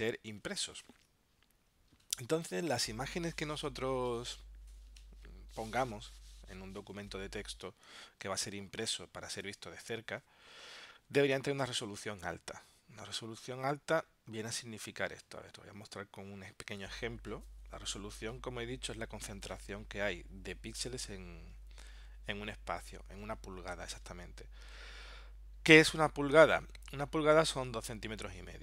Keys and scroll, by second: 9.2 super+Tab, 14.8 super+Tab.